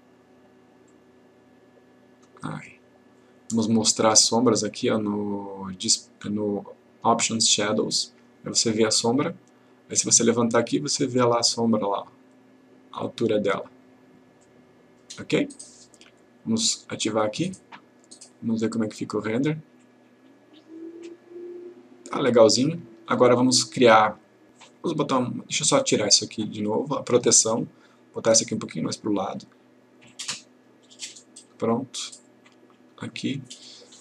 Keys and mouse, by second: 4.0 click, 7.9 click, 10.1-13.8 drag, 17.2 click, 19.1 click, 26.7-27.3 click, 32.7-33.0 click.